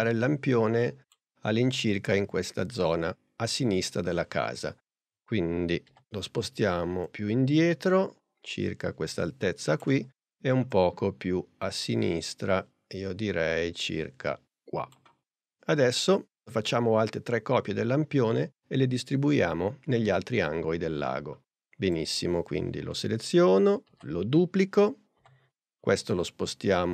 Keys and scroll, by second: 5.9 p, 23.9 super+d, 25.2 p.